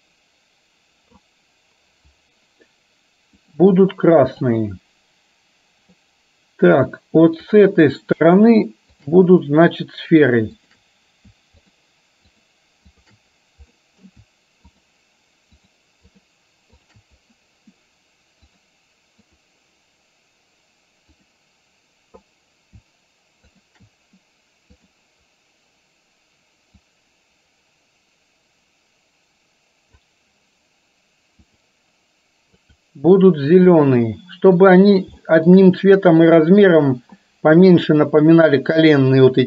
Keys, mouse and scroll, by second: 4.2 click, 6.1-6.9 middle drag, 7.6 click, 9.1 shift+click, 10.7 shift+click, 11.7 shift+drag, 13.7-14.1 middle drag, 14.7 shift+click, 15.7 shift+drag, 16.1 shift+click, 16.7 shift+click, 18.7 click, 21.2-21.9 drag, 26.7-30.0 drag, 32.7 click, 33.9-34.6 middle drag, 35.2 shift+middle drag.